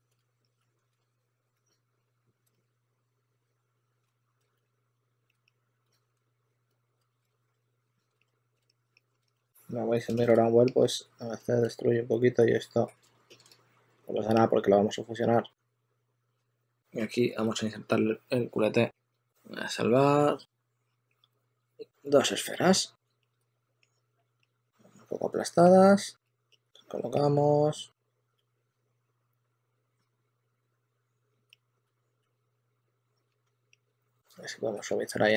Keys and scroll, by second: 0.0-2.1 typing, 4.0 super+z, 6.9 super+z, 7.0 super+z, 7.5 2, 7.8 2, 7.9 2, 8.2 2, 9.3 s, 11.9 shift+f, 12.2 shift+f, 23.3 w, 23.7 w, 24.3 w, 26.1-26.6 typing, 28.0-29.4 typing, 30.7-32.2 typing, 33.2 s, 34.8 s.